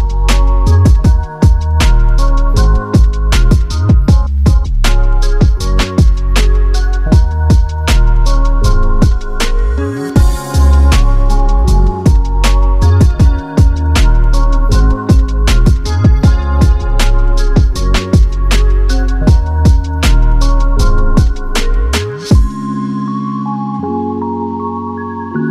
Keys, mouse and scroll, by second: 1.7 scroll down 2, 1.8 middle click, 5.2 double click, 5.2 space, 5.3 double click, 5.4 right click, 5.8 middle click, 6.4-6.9 scroll up 3, 7.0 scroll up 7, 7.9-8.3 scroll down 4, 8.4-9.0 scroll down 3, 9.1-9.5 scroll up 10, 9.5 double click, 9.6 right click, 10.1-11.5 scroll down 20, 11.5 middle click, 11.8 scroll up 4, 12.0 scroll down 3, 12.7 typing, 17.0 Return, 17.4-17.9 typing, 17.8 Return, 18.1 scroll down 3, 18.2 middle click, 18.6-19.2 scroll up 3, 19.2-19.9 scroll down 2, 19.9 double click, 22.9 right click, 23.5 scroll up 4, 24.7-25.4 scroll down 3, 25.4 double click.